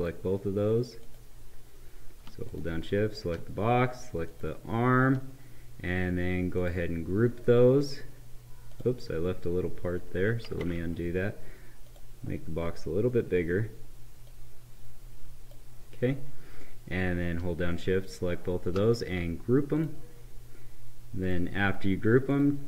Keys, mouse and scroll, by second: 4.1 shift+click, 5.0-6.4 shift+drag, 6.5-10.2 drag, 10.5 ctrl+z, 11.8-14.0 drag, 18.8-22.6 shift+drag.